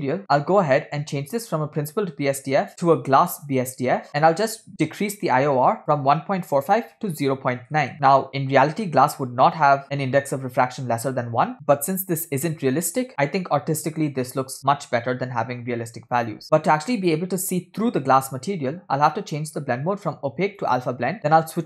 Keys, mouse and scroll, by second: 0.2-0.9 scroll down 4, 1.3-4.1 drag, 4.4-7.9 drag, 16.4-17.9 scroll down 3, 19.4-21.2 drag.